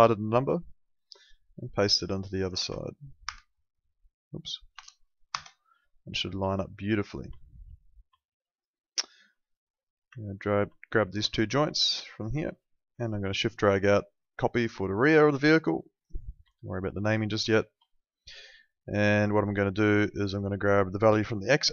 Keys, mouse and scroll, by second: 0.6 click, 2.6 v, 3.2 \, 4.7 BackSpace, 5.3 Return, 5.3 KP_Enter, 6.4 alt+middle click, 7.4 alt+middle click, 8.2 alt+middle click, 10.2 ctrl+click, 10.8 alt+middle click, 12.0 alt+middle click, 13.4 shift+click, 16.0 click, 16.5 alt+middle click, 17.4 alt+middle click, 18.3 alt+middle click, 20.0 click.